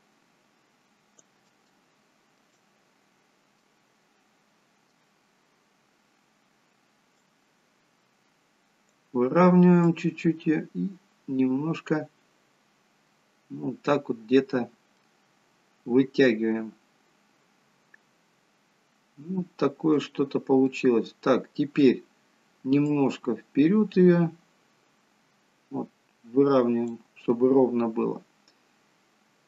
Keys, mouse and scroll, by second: 2.0 shift+middle click, 3.1-3.7 scroll down 1, 3.7 middle click, 5.3-6.1 scroll up 1, 7.3 click, 9.9 click, 14.4-15.1 scroll down 1, 15.1 middle click, 20.8 middle click, 22.9 click, 27.4 middle click.